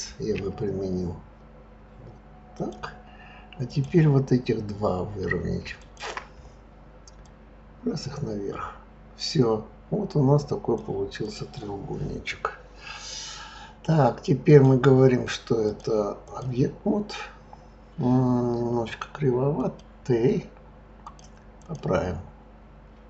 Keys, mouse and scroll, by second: 0.3 s, 3.7 click, 5.8 shift+click, 7.2 click, 11.2 click, 14.5 click, 15.6-18.6 drag, 19.6 click, 21.0-23.0 drag.